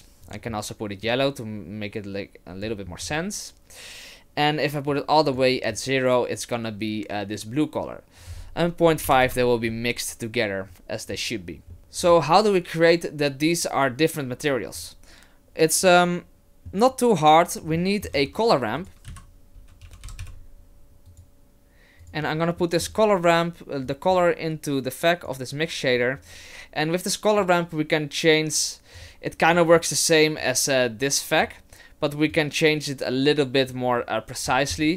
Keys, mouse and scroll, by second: 0.2 click, 3.0 click, 4.9 click, 8.2 click, 11.7 middle click, 12.1 click, 17.7 middle click, 18.1 shift+a, 22.6 middle click, 23.9 click, 27.4 click, 29.5 click, 30.4 click, 32.3 click, 34.5-34.9 scroll up 5.